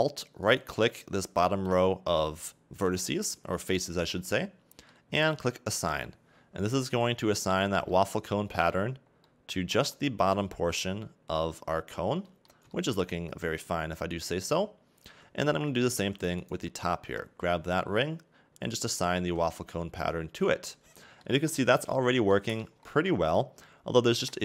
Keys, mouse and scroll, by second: 0.5 alt+right click, 3.7 scroll down 2, 3.8 middle click, 6.1 click, 6.7-7.1 scroll up 1, 7.4 a, 7.6 Tab, 7.9 middle click, 9.1 scroll down 2, 9.3 middle click, 9.9-10.8 scroll up 2, 10.8-11.3 scroll up 1, 11.4-12.3 scroll down 2, 12.3 middle click, 13.1-14.2 scroll up 1, 14.2 right click, 15.6 Tab, 16.4 alt+right click, 18.8 click, 19.2 a, 19.5 Tab, 19.8-20.9 scroll down 2, 21.0 middle click, 22.2 scroll down 2, 22.3 middle click, 22.8-23.5 scroll up 2, 23.5 scroll up 2, 24.3-24.4 scroll up 1.